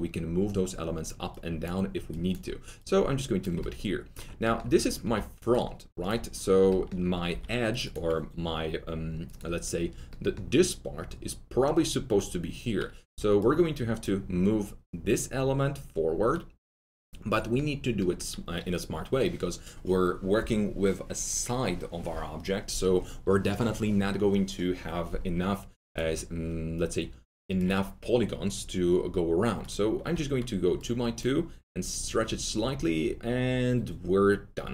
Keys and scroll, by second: 3.5 ctrl+z, 5.0 alt+4, 7.2 alt+2, 13.0 4, 30.1 1.